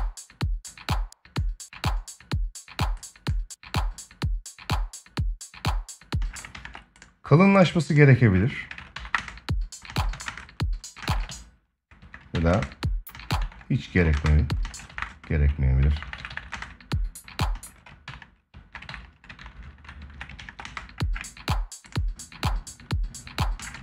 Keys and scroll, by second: 5.9 space, 6.3 ctrl+s, 8.9 space, 10.7 space, 12.1 ctrl+Up, 13.7 ctrl+Down, 13.9 space, 16.2 space, 20.1 ctrl+s, 20.3 space, 23.3 space, 23.5 ctrl+s.